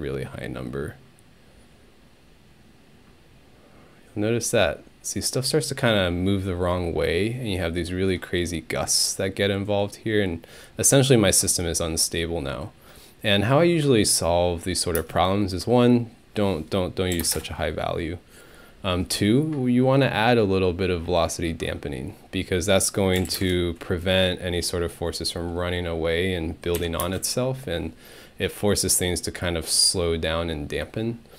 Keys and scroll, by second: 15.0 space, 16.9-17.7 typing, 23.0-23.8 typing, 26.8 Home, 27.0 space.